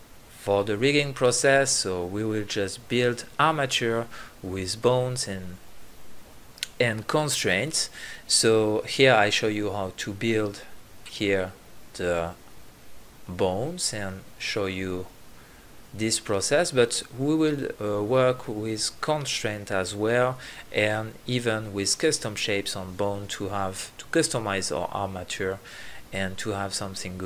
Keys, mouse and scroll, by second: 0.0 e, 0.7 ctrl+z, 1.3 shift+e, 1.7 click, 2.4 KP_3, 2.7 g, 4.2 g, 5.1 click, 5.4 e, 6.0 click, 6.1 e, 6.7 middle click, 6.8 click, 7.2 e, 8.4-9.0 drag, 9.4-12.0 drag, 9.4 e, 10.1 e, 11.3 e, 12.0 g, 12.2 right drag, 12.4-12.9 drag, 13.1 KP_1, 16.3 b, 16.8 b, 17.1 KP_1, 18.9 h, 20.2 alt+h, 21.1 KP_1, 21.6 right click, 21.7 click, 24.3 right click, 25.2 b, 25.5 click.